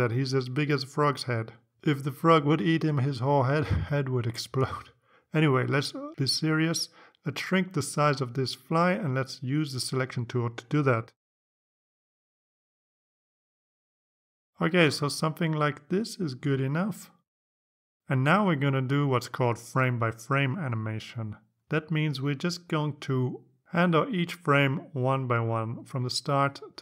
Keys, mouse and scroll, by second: 9.9-14.8 drag, 17.1-18.5 drag, 24.4 click.